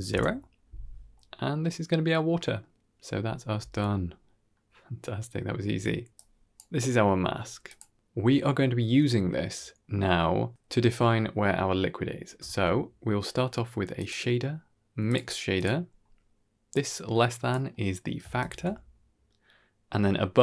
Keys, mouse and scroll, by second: 1.0-2.4 middle drag, 3.2-4.0 scroll down 1, 4.0 scroll down 1, 4.1 middle click, 5.4 middle click, 6.0 click, 6.7 middle click, 7.1 g, 8.1 scroll down 2, 8.2-8.9 middle drag, 9.7 middle click, 11.4 middle click, 12.3 shift+a, 15.8-16.6 scroll up 1, 16.6-17.4 drag, 16.6 scroll up 1, 17.6-18.0 middle drag, 18.3 ctrl+shift+click, 18.8-19.2 middle drag.